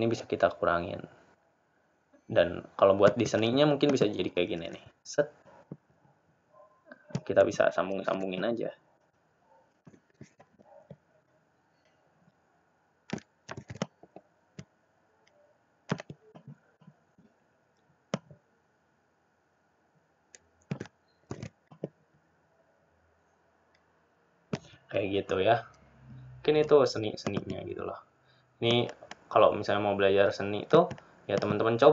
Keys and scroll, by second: 18.7 ctrl+d.